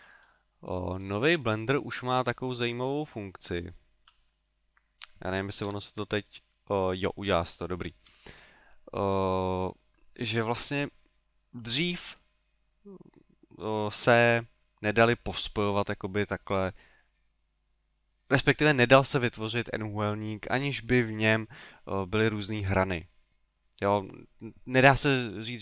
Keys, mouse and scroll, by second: 0.7 right click, 1.4 shift+right click, 1.9 shift+right click, 2.4 shift+right click, 3.0 shift+right click, 3.7 shift+right click, 4.5 middle click, 5.7 f, 6.3 middle click, 7.8 ctrl+z, 8.3 middle click.